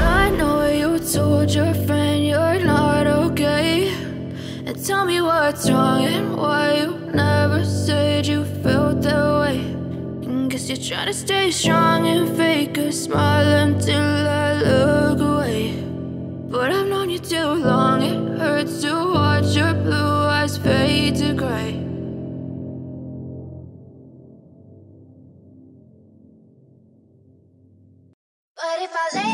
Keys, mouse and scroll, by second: 1.1 click.